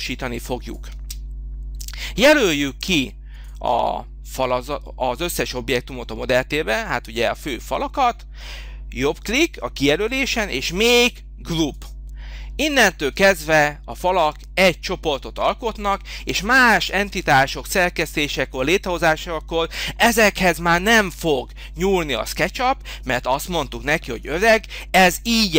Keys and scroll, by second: 1.0 space.